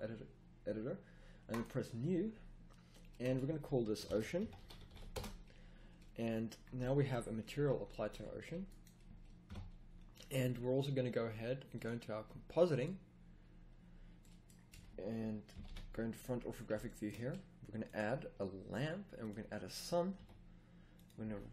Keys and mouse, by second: 6.1 middle click, 7.0 middle click, 8.1 a, 9.4 KP_0, 13.2 middle click, 13.7 middle click, 14.6 a, 15.5 KP_5, 15.6 KP_1, 20.1 g, 21.2 r.